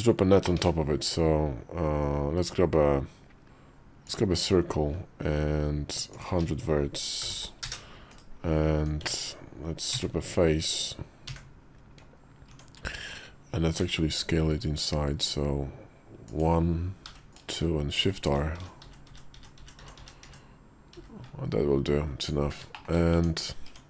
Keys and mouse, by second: 0.4 shift+a, 6.0-7.6 drag, 7.2 0, 8.0 /, 8.8 Tab, 9.8 a, 11.2 f, 12.4 Tab, 13.7 i, 17.9-20.8 typing, 22.0 Tab, 22.6 shift+click, 23.0 Tab, 23.6 Tab.